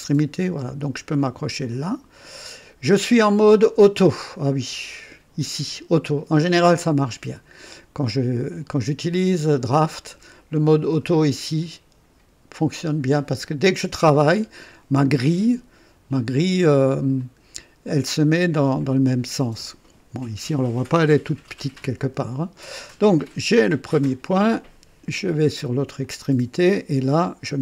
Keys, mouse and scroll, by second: 1.7 ctrl+click, 17.1 click, 18.1 click, 26.0 click.